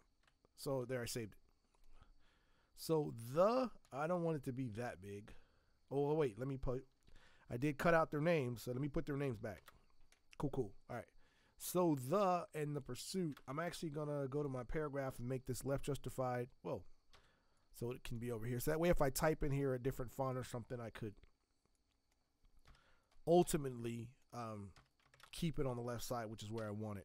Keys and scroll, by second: 3.8 t, 6.1 Escape, 7.1 t, 8.2 ctrl+v, 9.6 ctrl+Return, 13.3 ctrl+Return, 17.1 v, 21.0 t, 25.1 ctrl+Return, 26.4 v.